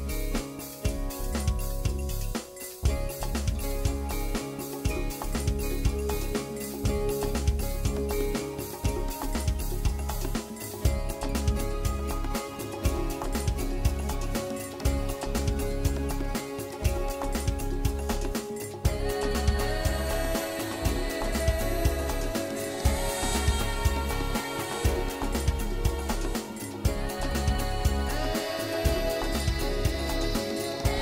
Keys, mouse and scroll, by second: 2.4 Tab, 2.5 middle click, 4.1 Tab, 4.4 middle click, 5.5 middle click, 6.6 KP_7, 7.2 shift+middle click, 7.6 scroll up 6, 8.9 scroll down 4, 10.1 click, 10.4 middle click, 11.1 click, 11.4 shift+click, 11.9 KP_7, 12.9 scroll down 3, 15.6 click, 17.6 r, 24.1 click, 24.4 scroll up 5, 24.6 shift+middle click, 25.0 scroll up 1, 25.2 middle click, 27.0 scroll down 6, 27.4 shift+middle click, 27.6 shift+middle click, 28.0 middle click, 28.7 click, 29.0 shift+click, 29.7 KP_7, 30.4 shift+middle click, 30.7 scroll down 4.